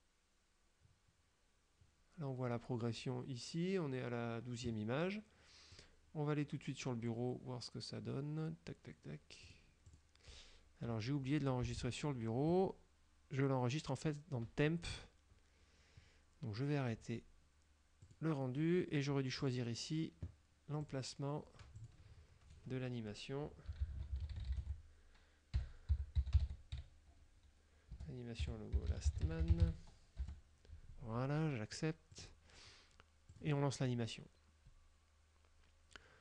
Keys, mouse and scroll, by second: 5.8 click, 9.6 click, 10.1 click, 11.9 alt+Tab, 18.1 click, 19.5 click, 20.9 click, 21.9 click, 23.6-27.0 typing, 28.1-30.2 typing, 30.3 Return, 32.2 click, 33.4 click.